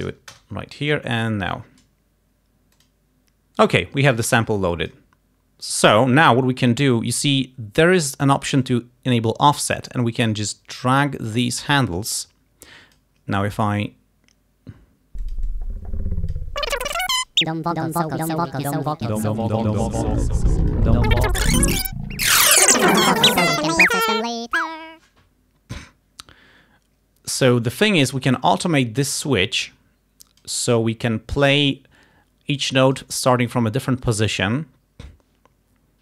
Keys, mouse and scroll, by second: 0.4 Return, 1.2 click, 2.9 click, 4.6 click, 8.7 click, 10.6-13.2 drag, 15.3-16.6 drag, 16.7-19.1 drag, 19.3-23.6 drag, 28.1-30.7 drag, 32.6 click.